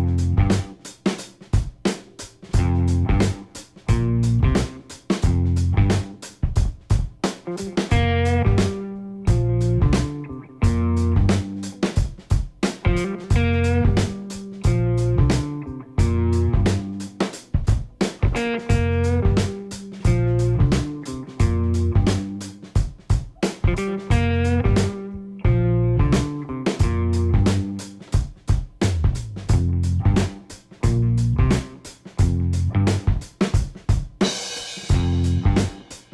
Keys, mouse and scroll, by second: 1.9 click, 2.8 click, 3.9 click, 4.6 click, 5.6 click, 7.2 click, 9.0 KP_Add, 11.2 click, 11.7 click, 13.0 scroll down 1, 13.9 scroll down 1, 14.7 click, 15.0-15.4 scroll down 1, 15.7-16.4 scroll down 2, 17.0 scroll down 1, 17.8 click, 19.4 click, 21.0 click, 26.2 click, 29.0 click, 30.8 click, 32.7 click, 33.8 click, 35.8 click.